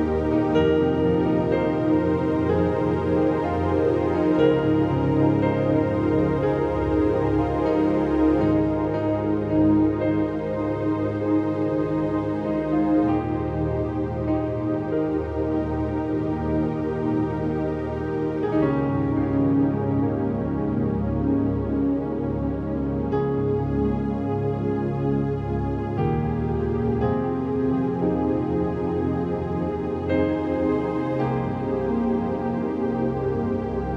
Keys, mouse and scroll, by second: 5.1 click, 7.7 click, 8.7-11.1 typing, 12.3 click, 13.1 v, 13.7 click, 16.7 click, 16.9 click, 17.3 ctrl+j, 18.6-21.4 drag, 22.7 ctrl+j, 23.6-25.4 drag, 27.0 Return, 27.6 click, 30.4 Return, 31.2 ctrl+d, 32.2 click, 32.9 scroll down 1, 33.1 space, 33.1 click, 33.3 space, 33.4-33.9 scroll up 1.